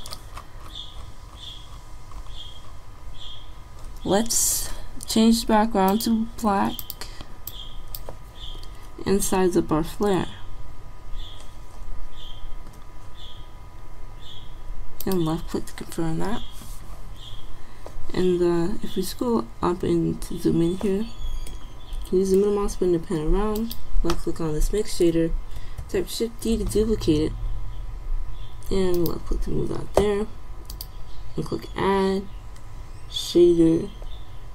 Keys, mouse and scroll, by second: 9.4 s, 19.4-21.8 middle drag, 26.0 shift+d.